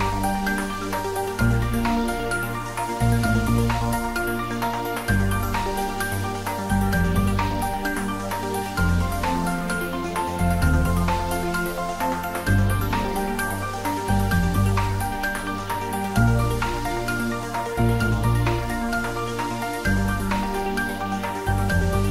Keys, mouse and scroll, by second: 0.3 click, 1.3 middle click, 1.8 ctrl+r, 2.1 click, 3.6 middle click, 5.1 click, 5.9 Tab, 6.4 ctrl+middle click, 6.9 middle click, 7.7 ctrl+r, 8.2 Tab, 8.7 ctrl+r, 8.9 click, 10.5 Tab, 10.9 ctrl+middle click, 11.3 right click, 11.8 click, 12.1 ctrl+middle click, 12.5-13.9 middle drag, 13.9 Tab, 14.8 ctrl+r, 15.2 click, 16.7 click, 17.2 ctrl+r, 17.8 click, 18.8 Tab, 19.1 ctrl+middle click, 20.1-22.1 middle drag.